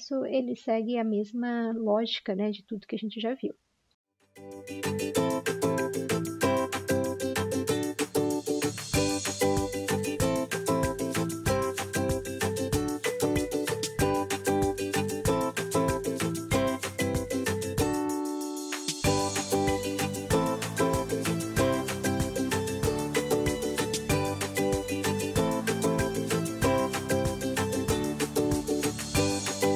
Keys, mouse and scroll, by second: 2.7 ctrl+d, 5.1 i, 6.4 typing, 9.1 Delete, 9.8-12.5 typing, 12.5 ctrl+z, 12.8 Escape, 12.8 ctrl+z, 15.8-16.9 typing, 19.4 g, 20.8 g, 21.6 l, 24.5-25.6 typing, 27.8 typing, 28.2 ctrl+d, 29.3 ctrl+z, 29.6 ctrl+z.